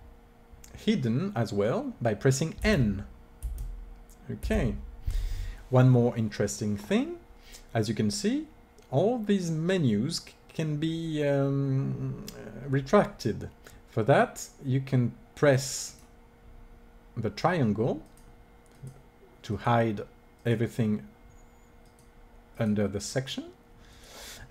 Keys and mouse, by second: 2.4 n, 3.2 n, 4.3 n, 15.7-17.6 drag, 17.9-24.5 drag.